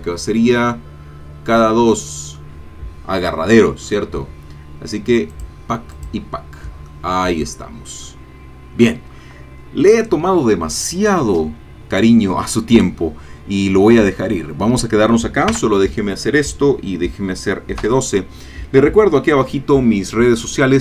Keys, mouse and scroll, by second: 1.4-2.6 middle drag, 3.8-4.1 scroll down 1, 5.3 click, 5.9 click, 6.9 middle click, 8.0 middle click, 9.4 middle click, 15.5 KP_0, 17.9 F12.